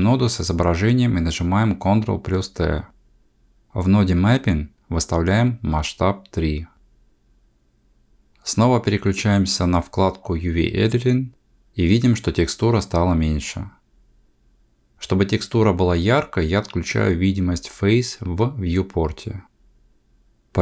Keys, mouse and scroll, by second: 1.2 click, 3.4 ctrl+t, 6.4 click, 12.2 click, 18.0 click.